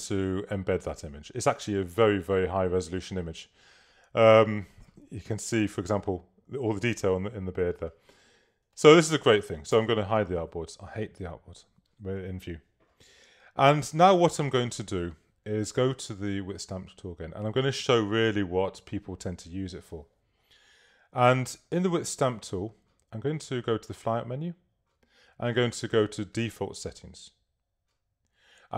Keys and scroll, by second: 5.1 super++, 6.5 super+-, 9.8 shift+super+h.